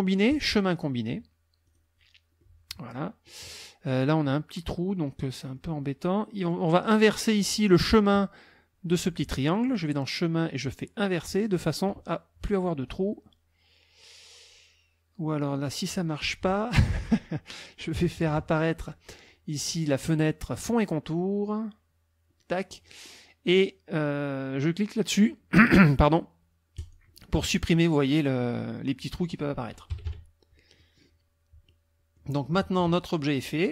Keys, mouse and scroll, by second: 0.3 click, 1.7 click, 2.4-3.1 scroll up 1, 5.4 scroll up 1, 6.8 click, 9.7 click, 11.6 click, 12.9 click, 15.5 click, 20.7 click, 26.8 click, 29.9 KP_Subtract, 30.8 middle click, 31.7 middle click, 33.2 click.